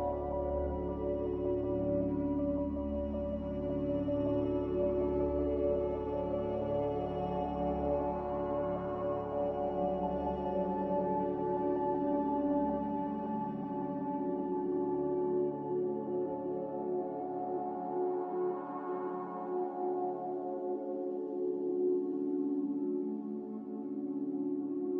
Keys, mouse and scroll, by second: 10.7 click, 13.8 click.